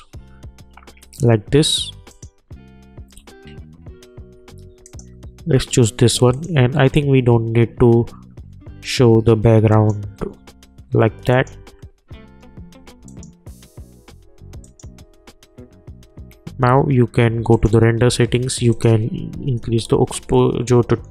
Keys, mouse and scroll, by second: 2.1 click, 4.8 click, 9.7 click, 17.5 click, 19.9 Return.